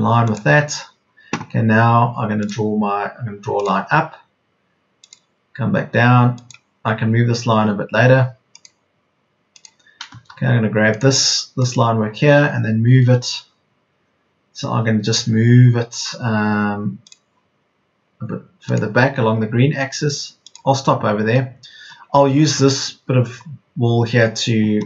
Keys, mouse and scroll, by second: 10.3 Escape.